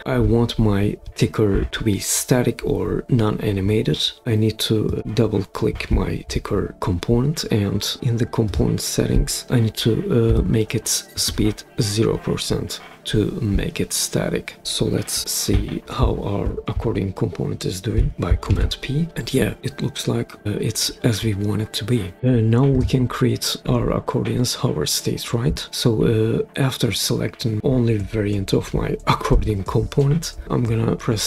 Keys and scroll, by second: 10.2 0, 11.1 Return, 18.4 super+p.